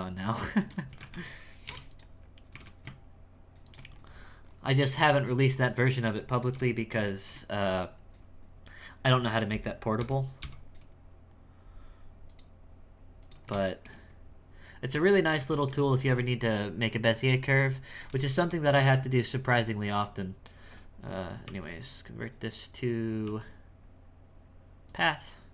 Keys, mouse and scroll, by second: 0.5 shift+right click, 0.9 s, 2.2 scroll up 3, 2.4 g, 3.9-5.8 scroll down 11, 5.8-6.5 scroll down 1, 6.5 k, 7.0-10.0 shift+middle drag, 10.0 n, 10.4 n, 12.3 click, 13.2 click, 13.6 shift+middle click, 14.1-14.9 scroll up 2, 14.9 Tab, 15.5-18.1 shift+middle drag, 18.1 n, 18.5 n, 21.4 w, 23.2 w.